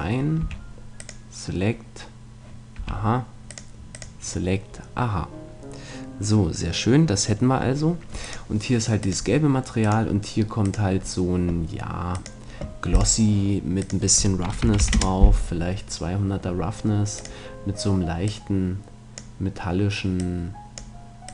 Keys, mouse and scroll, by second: 0.5 a, 2.8 a, 3.5-4.8 drag, 12.3-15.7 drag, 17.2-21.3 drag.